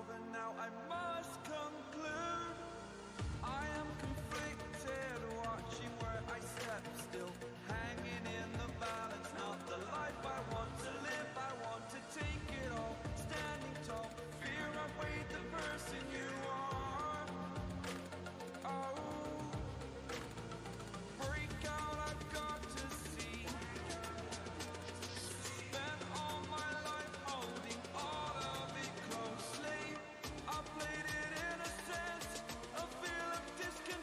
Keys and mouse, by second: 0.8 click, 2.6-3.3 typing, 2.8-4.1 alt+shift+click, 13.3-15.3 typing, 14.8 click, 18.7-22.6 drag, 30.8 click, 32.7-33.4 typing.